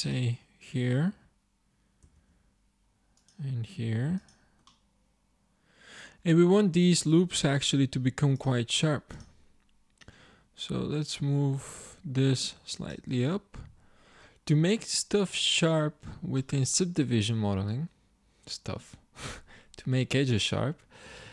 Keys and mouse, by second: 2.0 ctrl+r, 7.9 ctrl+Tab.